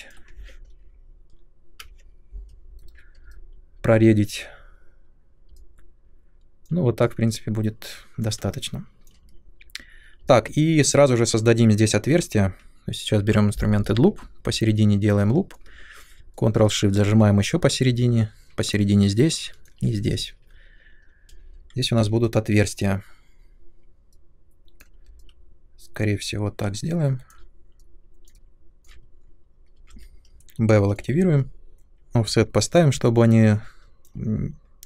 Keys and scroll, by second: 1.3 Up, 2.8 shift+Delete, 21.2 space, 21.9 3, 29.8 b.